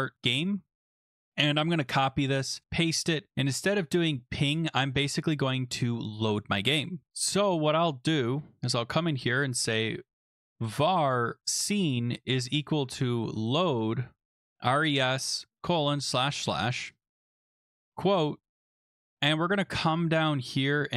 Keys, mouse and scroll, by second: 0.0-0.7 typing, 1.1 click, 1.1 click, 1.6 ctrl+c, 2.5 click, 2.6 click, 2.6 ctrl+v, 4.4 click, 7.1 click, 7.1 scroll down 10, 8.3 click, 9.4-18.5 typing, 18.7-19.1 Down, 19.3 Down, 19.4 Down, 19.6 Down, 19.8 Down, 19.9 Down, 20.1 Down, 20.3 Down.